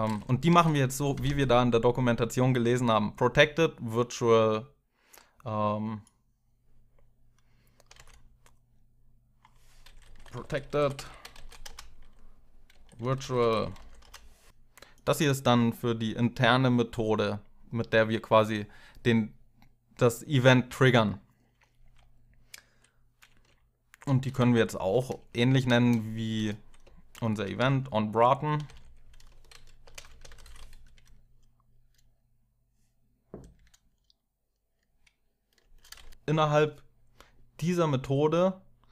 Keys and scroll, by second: 1.1 shift+Home, 1.1 alt+Tab, 7.7 alt+Tab, 9.5-14.0 typing, 23.8-30.1 typing, 30.5 ctrl+alt+0, 33.0 ctrl+alt+7, 33.1 ctrl+alt+0, 33.5 Left, 35.4 Return, 35.7 Return, 35.9 Up.